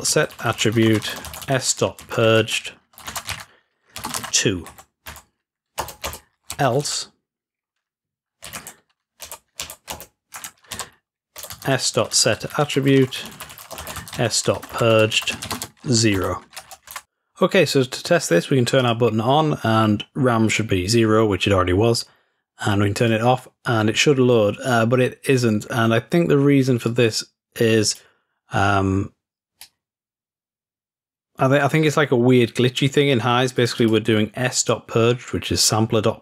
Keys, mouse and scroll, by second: 7.5-8.5 scroll down 2, 19.0-19.7 drag, 23.0 click, 26.9-28.8 drag, 29.7-32.6 drag, 33.6 click, 33.8 click, 34.6 click, 35.1-36.2 drag.